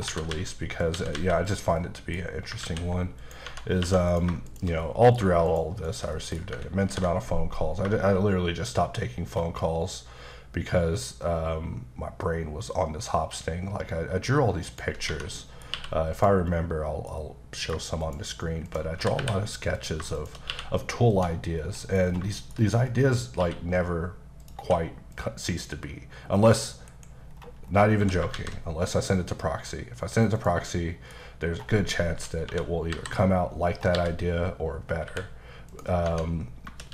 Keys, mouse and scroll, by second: 0.1-1.1 typing, 0.8 click, 1.5 click, 1.8 middle click, 2.6 ctrl+a, 3.2 click, 3.5 Tab, 3.8 2, 4.1 click, 4.5 shift+click, 4.8 middle click, 5.5 shift+click, 5.9 shift+double click, 6.1 middle click, 6.9 ctrl+b, 8.6-9.1 shift+scroll up 2, 9.8 shift+scroll up 3, 11.2 scroll up 1, 14.0-14.6 shift+scroll up 1, 14.6 shift+click, 15.1 Tab, 15.3 middle click, 15.7 q, 16.2 click, 16.5 middle click, 16.6 scroll up 1, 17.2 middle click, 18.0 shift+click, 18.9 typing, 19.8 click, 20.2 shift+click, 20.5 q, 21.1 click, 21.5-22.2 scroll down 4, 21.8 middle click, 22.3 shift+middle click, 22.6-22.9 scroll down 2, 22.9 middle click, 23.3 scroll up 1, 23.4 q, 24.4 click, 24.6 q, 25.1 click, 26.1-26.5 scroll down 1, 26.5 click, 26.9 KP_Decimal, 27.3-28.0 scroll down 5, 28.0 s, 28.3 shift+z, 30.4 click, 30.7 middle click, 31.2-32.2 scroll up 2, 32.2 KP_4, 32.9 KP_5, 33.7 scroll down 2, 33.9 g, 35.7 click, 36.0 scroll down 1.